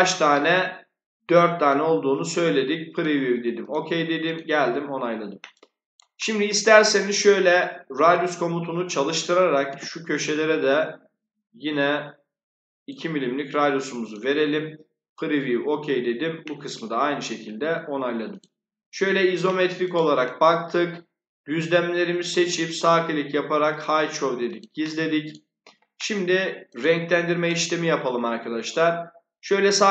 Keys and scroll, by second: 9.6 2.